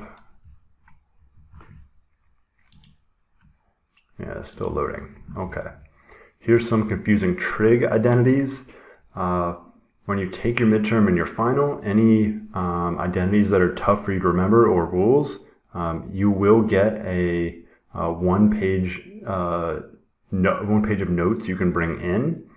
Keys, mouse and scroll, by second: 4.6 click.